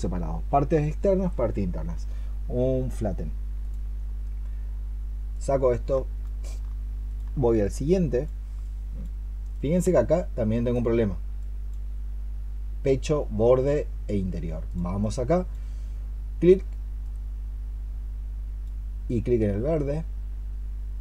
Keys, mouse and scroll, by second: 5.8 alt+click, 6.9 alt+click, 14.9 double click.